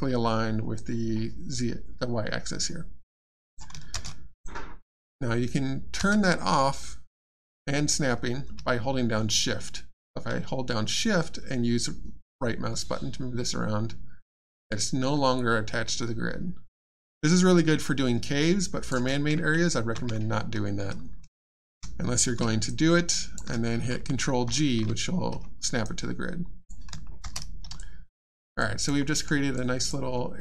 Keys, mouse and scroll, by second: 0.7 right click, 3.9 shift+space, 4.3 click, 4.3 click, 6.0 space, 12.7 shift+right click, 22.6 shift+right click, 24.4 ctrl+g, 25.8 right click, 27.2 shift+space, 27.8 alt+click, 29.0 alt+middle click, 29.2 alt+scroll down 1, 29.5 alt+click, 30.1 alt+middle click.